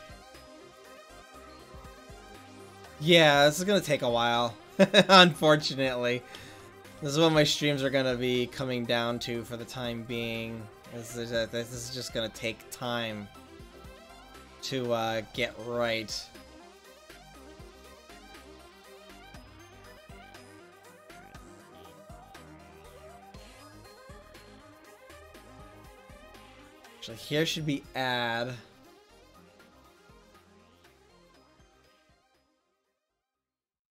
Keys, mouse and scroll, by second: 0.8-2.5 drag, 6.6-8.3 drag, 18.6-20.5 drag, 23.4-24.9 drag, 25.8-30.2 middle drag, 30.2 click.